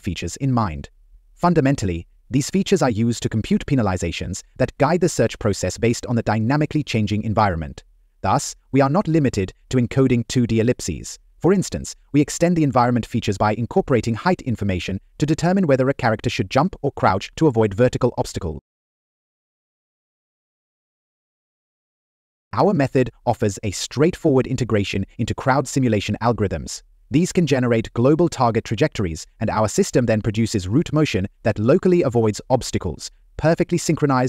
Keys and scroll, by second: 1.0 Right, 1.4 Up, 1.9 Left, 4.4 Left, 5.3 Down, 7.7 Left, 7.7 Up, 9.5 Up, 10.6 Right, 11.3 Up, 14.6 Up, 17.4 Up.